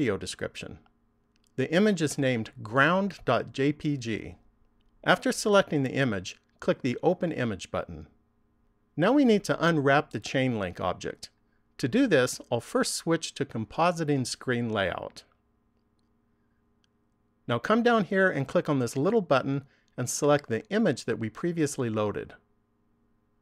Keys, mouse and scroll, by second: 7.5 click, 12.9 click.